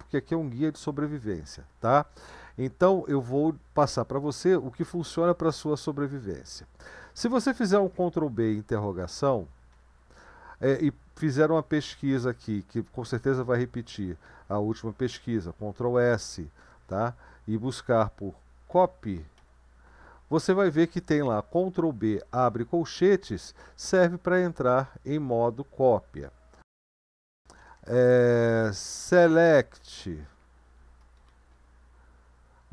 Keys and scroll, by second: 8.0 ctrl+b, 9.7 BackSpace, 27.4-32.0 typing.